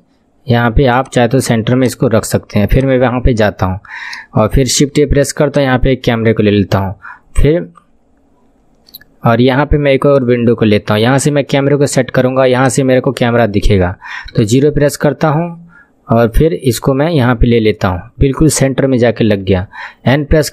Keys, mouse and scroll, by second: 4.8 shift+a, 10.3-19.3 drag, 16.3 scroll, 19.3 n.